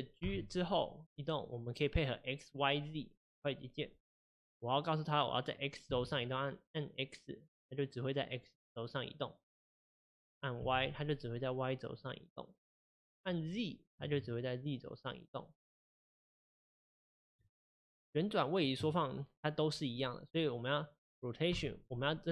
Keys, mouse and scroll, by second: 0.3 g, 20.6 click, 21.6 r.